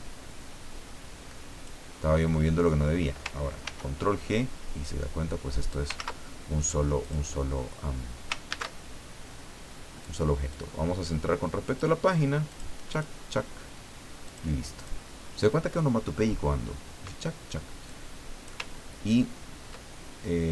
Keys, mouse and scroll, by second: 3.6 ctrl+g, 4.8-5.9 drag, 5.9 ctrl+z, 7.0 click, 8.5 ctrl+shift+a, 10.0 click, 10.5-12.0 drag, 12.5 click, 12.9 click, 14.3 click, 14.7 click, 17.8 click, 18.7 ctrl+scroll up 2, 19.3 ctrl+scroll down 2.